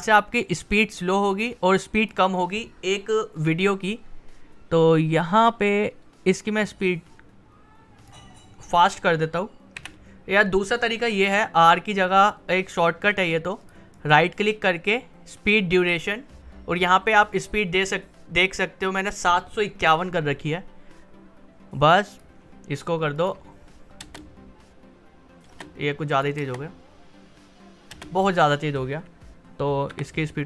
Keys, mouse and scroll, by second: 4.8-9.7 drag, 9.7 v, 13.0 click, 13.9 right click, 15.5 click, 22.1 click, 24.0 space, 26.1 click, 26.4 space, 29.9 r.